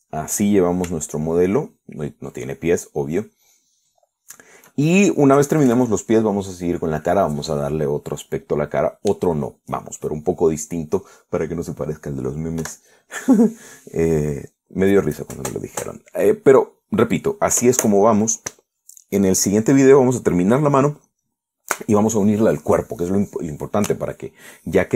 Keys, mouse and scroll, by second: 2.3-4.9 shift+middle drag, 5.1 shift+middle click, 6.6 KP_Add, 13.9 3, 16.8 click.